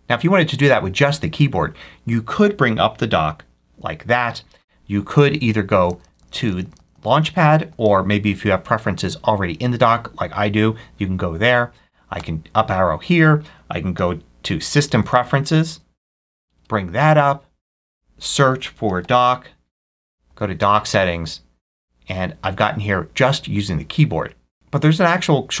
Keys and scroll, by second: 3.5 ctrl+F3, 5.6 Left, 6.2 Left, 6.8 Left, 12.0 Up, 13.8 s, 14.8 Down, 16.4 Return, 18.5-19.6 typing, 20.2 Down, 20.8 Return.